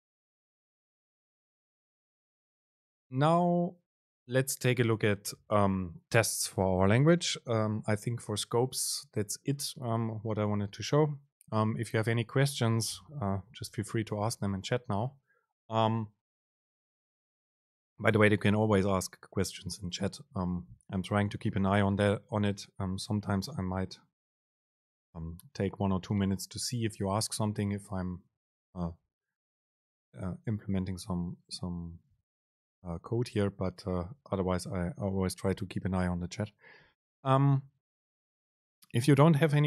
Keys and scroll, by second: 2.0 BackSpace.